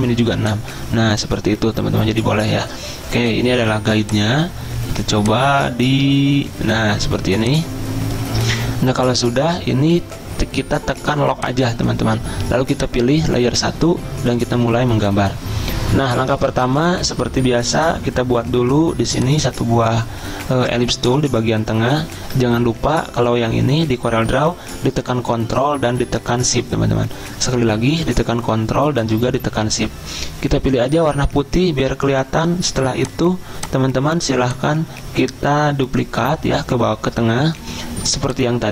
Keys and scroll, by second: 4.3 typing.